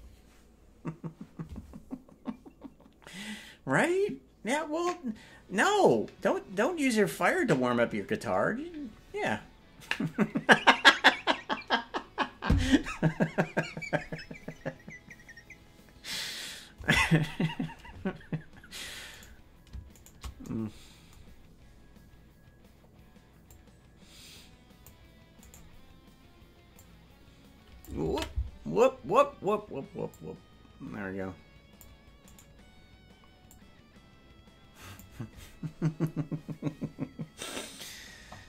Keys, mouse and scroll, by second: 19.2 right click, 20.0 shift+right click, 23.4-24.9 drag, 25.5 right click, 26.7-27.9 drag, 29.0 ctrl+z, 30.1-31.8 drag, 32.3 right click, 33.4-35.0 drag.